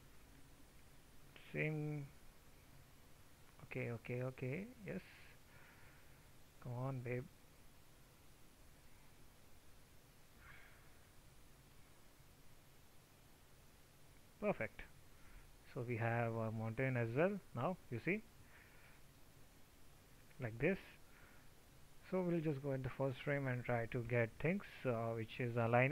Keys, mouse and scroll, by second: 15.4 alt+t.